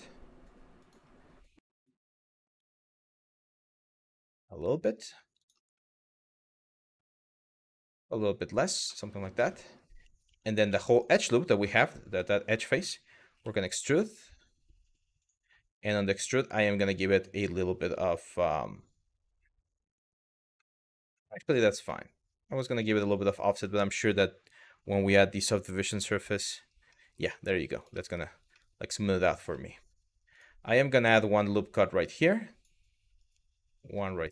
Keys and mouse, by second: 0.4 click, 1.5 click, 2.3 g, 2.9 y, 5.5 middle click, 6.7 g, 7.0 y, 8.2 click, 8.6 middle click, 9.1 shift+middle click, 9.9 3, 11.3 middle click, 12.3 middle click, 14.8 click, 20.3-21.3 middle drag, 21.6 middle click, 22.1 Tab, 22.6 middle click, 23.6-25.8 drag, 26.6 middle click, 27.4 click, 27.7 Tab, 28.3 shift+middle click, 30.0 click, 30.8 click, 32.8 click.